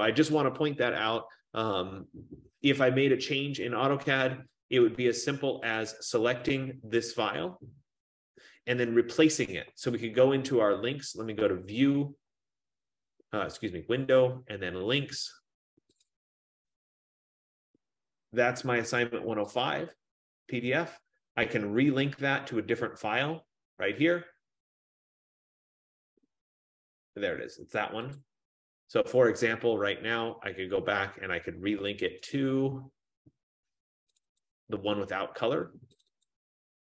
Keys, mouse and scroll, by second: 4.7 click, 6.7 click, 11.6 click, 16.1 click, 19.8 click, 26.1 F15, 28.3 click, 32.4 click, 34.3 click, 34.5 click, 36.1 click, 36.4 click.